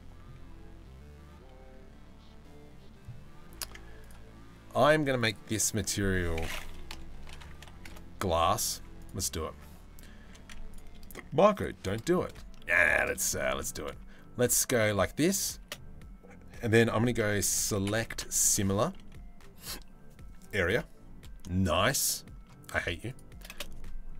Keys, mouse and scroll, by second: 3.3 Tab, 3.6 click, 4.8 click, 5.2-6.6 drag, 7.0 click, 7.6 s, 9.2 Tab, 9.9 3, 12.2 shift+middle click, 13.0 shift+middle click, 15.3 space, 21.4 shift+middle click, 22.7 shift+middle click, 24.0 space.